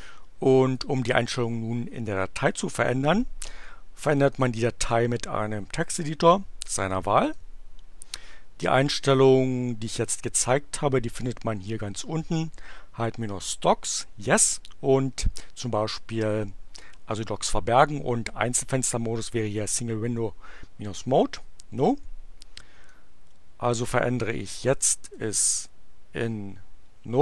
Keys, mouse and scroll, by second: 4.2 click, 7.2-9.0 drag, 22.8-24.0 drag, 25.1 n, 25.6 o.